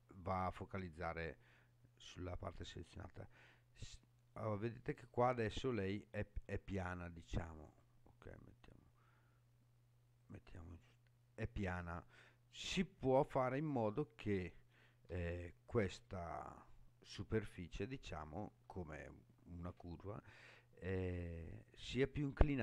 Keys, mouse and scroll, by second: 0.6-1.2 scroll down 4, 1.3-3.6 scroll down 9, 3.6-5.4 middle drag, 7.7 click, 10.2 click, 13.9 middle click, 15.2-16.2 shift+middle drag, 16.5 shift+middle click, 17.3 scroll down 2, 18.0 shift+middle click.